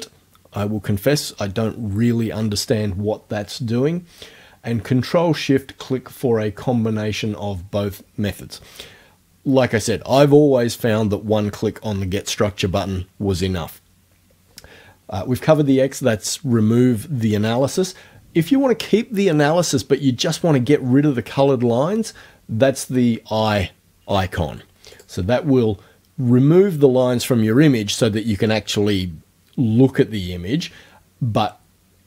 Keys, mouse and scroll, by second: 25.0 click.